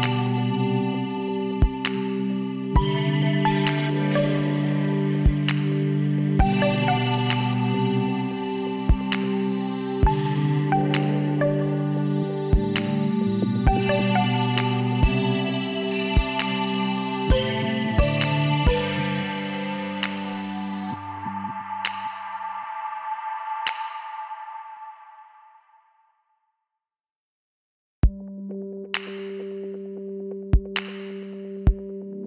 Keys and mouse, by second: 0.8 s, 3.8 z, 5.1 z, 6.8-8.4 middle drag, 8.6-11.2 middle drag, 11.4 middle click, 12.0-13.9 drag, 12.7 x, 15.0 shift+s, 17.0 middle click, 17.4 click, 18.6 click, 19.5 l, 20.1 KP_1, 24.6-30.5 middle drag, 30.8 click, 31.8 KP_7.